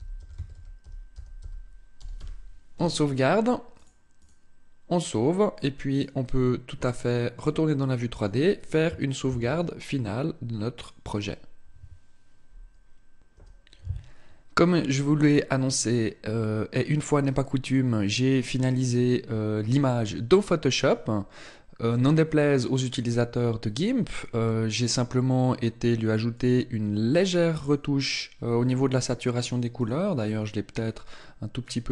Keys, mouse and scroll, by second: 9.3 ctrl+s.